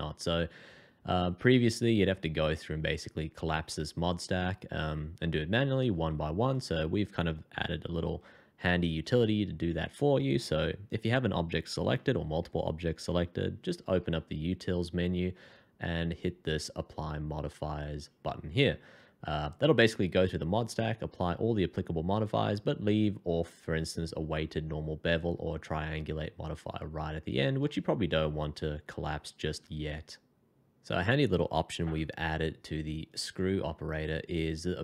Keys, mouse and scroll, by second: 14.1 alt+t, 27.7 middle click.